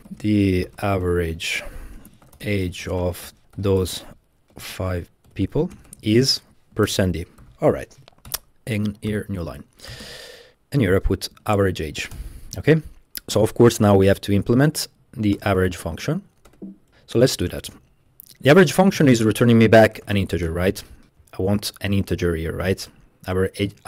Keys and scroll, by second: 0.0-12.2 typing, 12.2 Return, 12.6 Escape, 14.1 Up, 14.3 Up, 14.6 Up, 14.9 Up, 15.4 Return, 15.6 Return, 16.5 i, 16.9 Up, 17.5 Return, 18.1 Up, 19.8-20.7 typing.